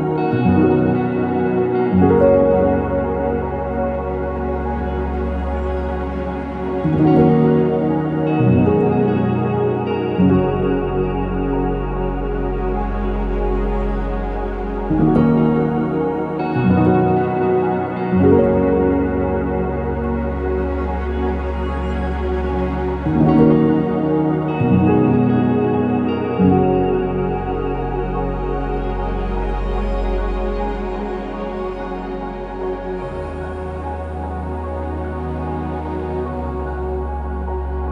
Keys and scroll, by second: 8.0-8.9 typing, 16.3 ctrl+z, 17.2 Escape, 17.4 Escape, 23.7 Escape, 33.7 ctrl+s, 35.3 0, 35.3 Return.